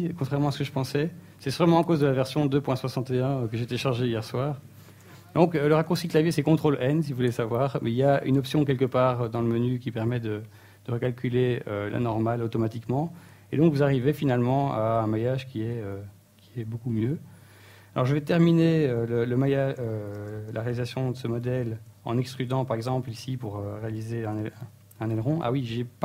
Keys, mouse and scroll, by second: 4.9 space, 11.3 ctrl+n, 12.7 Tab, 13.2 Tab, 13.7 Tab, 13.9 click, 14.9 middle click, 15.8-16.4 scroll down 1, 16.4 middle click, 19.4-19.8 scroll down 2, 19.8 middle click, 21.5 middle click, 22.2 Tab, 23.0 middle click, 23.7 KP_3, 24.3-24.8 scroll up 2, 24.9 shift+middle click, 25.6 ctrl+Tab.